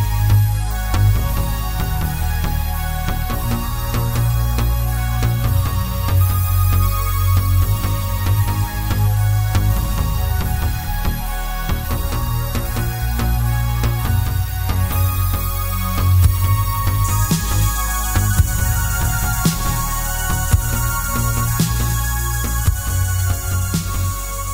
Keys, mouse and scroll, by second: 0.3-1.2 scroll down 1, 1.3 g, 2.1 click, 2.4 shift+d, 4.3 click, 4.6 scroll down 1, 4.9-6.4 middle drag, 5.5 scroll up 1, 6.1-6.4 scroll up 1, 6.4 click, 7.1 Tab, 7.3 click, 7.7 i, 8.3 click, 8.8-10.1 right drag, 10.1 click, 10.5 Tab, 10.7 click, 11.2 click, 11.7 h, 11.9 click, 12.1 click, 12.7 Tab, 13.0 click, 13.5 middle click, 13.8-14.2 scroll up 1, 14.3-15.3 drag, 15.3 2, 15.5 click, 15.7 scroll up 1, 16.3 click, 17.6 shift+click, 18.3 scroll down 1, 18.5-22.8 middle drag, 20.7 e, 22.8 click, 23.2 scroll down 1, 23.4-24.5 middle drag.